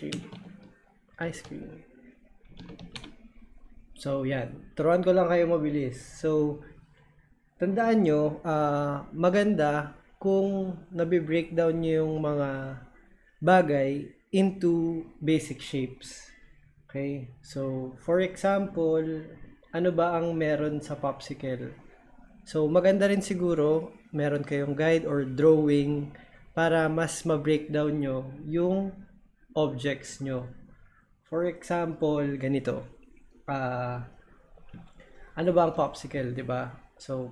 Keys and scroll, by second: 0.0-3.4 typing.